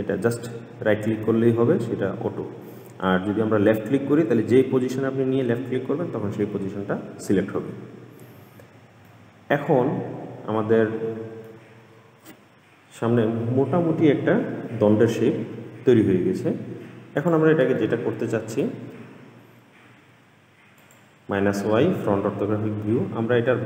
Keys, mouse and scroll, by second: 6.8-9.3 scroll down 1, 9.3-12.1 middle drag, 12.1-15.1 scroll down 1, 17.4 click, 17.9-21.0 middle drag, 21.0 click.